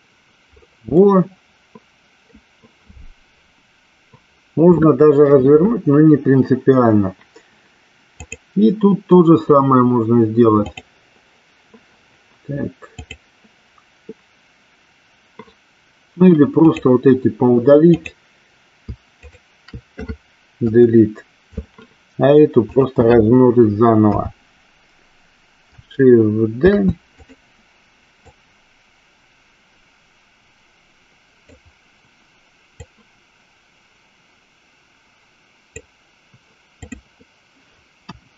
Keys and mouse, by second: 1.3-2.6 middle drag, 8.3 click, 10.8-11.9 drag, 13.2-15.7 drag, 16.8 click, 18.1 click, 22.9 click, 24.3 KP_3, 26.9 shift+d, 28.3-31.7 drag, 32.9-36.1 drag, 36.9 click, 38.2 KP_1.